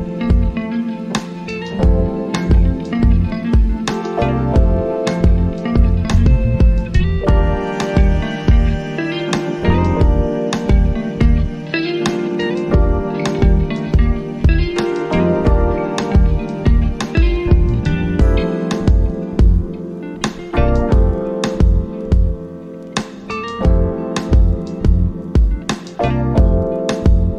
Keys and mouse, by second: 13.6-18.1 drag, 18.6 shift+Num_Lock, 18.6-26.3 shift+drag.